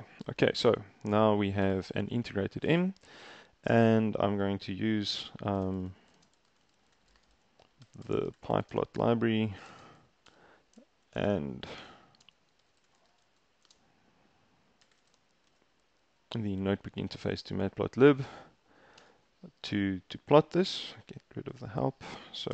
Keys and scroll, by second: 1.7 Return, 5.4-16.0 typing, 19.1 shift+Return.